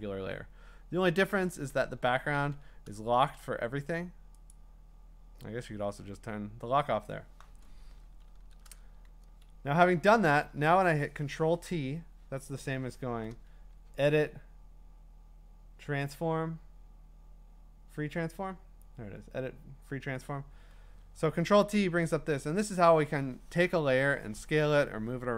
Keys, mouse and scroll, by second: 2.4 ctrl+z, 4.5 click, 8.3 ctrl+t, 9.5 Escape, 10.4 ctrl+t, 13.6 Escape, 14.1 click, 20.3 Escape, 21.5 ctrl+t.